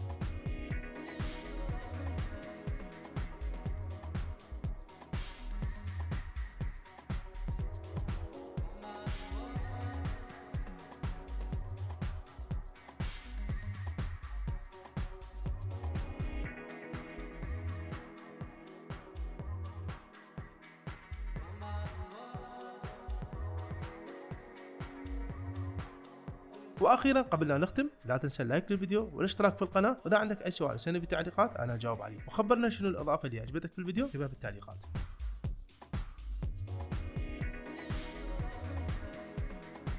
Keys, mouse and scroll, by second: 0.0 space, 2.5 space, 4.9 shift+Left, 11.1 shift+Left, 11.8 space, 13.5 space, 21.8 space, 23.6 shift+Left, 23.8 space, 24.3 space, 26.0 space, 34.7-36.0 drag.